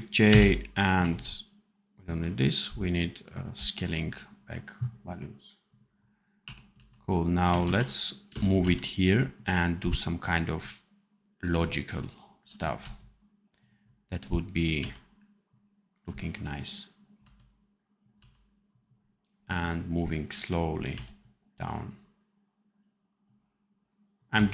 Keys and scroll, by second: 0.2 ctrl+shift+j, 6.3 1, 6.6 c, 7.5 ctrl+z, 8.2 space, 8.5 v, 12.7 c, 14.7 v, 17.1 c, 18.1 v, 20.8 v, 24.2 c.